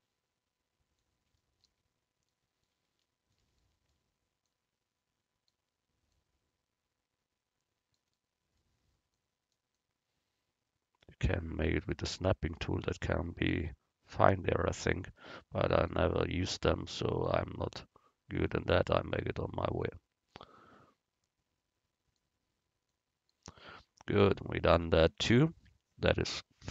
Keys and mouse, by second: 4.5-8.0 drag, 9.2-11.5 drag, 11.9 middle click, 15.1 s, 18.2 click, 19.8-22.2 drag, 22.9 click, 24.2 a.